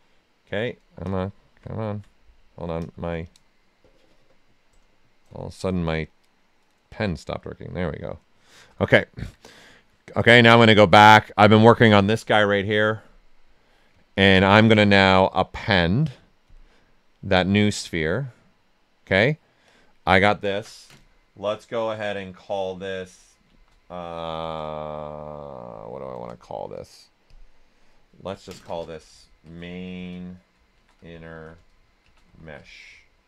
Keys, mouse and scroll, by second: 4.7-7.4 drag, 7.5 right click, 8.6 typing, 9.6-13.9 drag, 13.6-14.4 typing, 14.0 ctrl+right click, 15.1 click, 18.8 right click, 19.6 click, 22.9 click, 23.4 shift+m, 27.2 click, 29.4-33.0 typing.